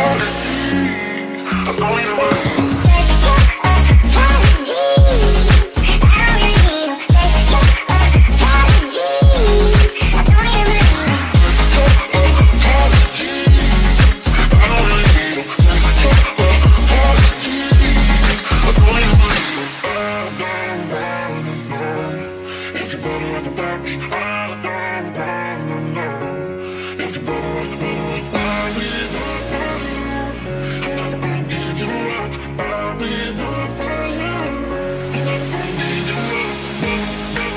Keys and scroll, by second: 0.6-3.3 typing, 3.1 ctrl+z, 4.8 s, 5.7 Escape, 5.9 d, 7.0 d, 8.7-9.9 typing, 11.8-12.7 typing, 16.9 d, 17.7 Escape, 18.1-19.4 typing, 19.4 ctrl+s, 22.0-24.4 typing, 25.6 q, 26.7 q, 27.2 q.